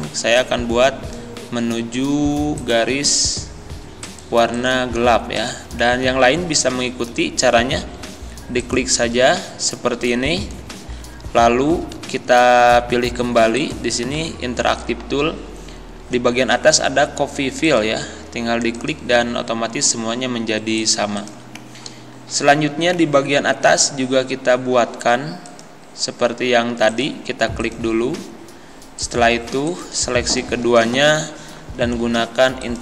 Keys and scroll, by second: 10.9 ctrl+z.